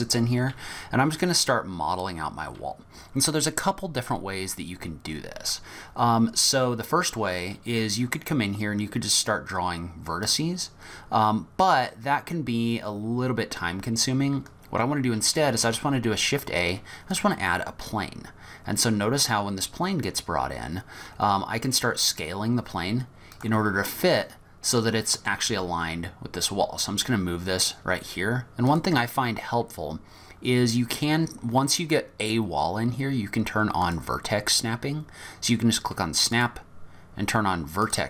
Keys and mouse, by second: 1.1 middle click, 15.7 shift+a, 21.1 s, 25.5 g, 33.9 click, 36.4-38.0 drag.